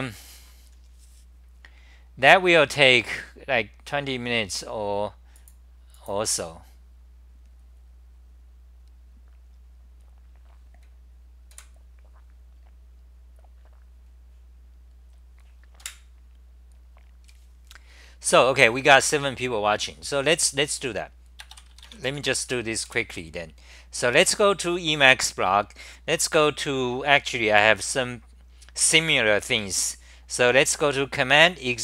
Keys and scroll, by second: 22.4 Return, 22.9 super+r.